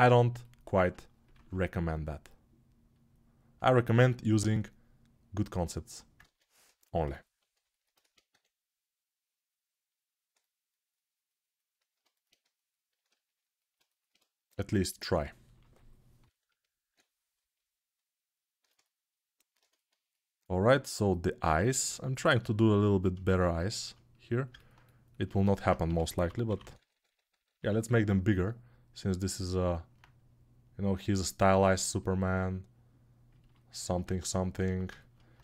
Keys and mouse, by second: 6.1 ctrl+Tab, 6.7-12.0 ctrl+alt+right drag, 12.0-24.3 shift+drag, 17.1 ctrl+], 25.6 g, 31.3-35.4 alt+drag.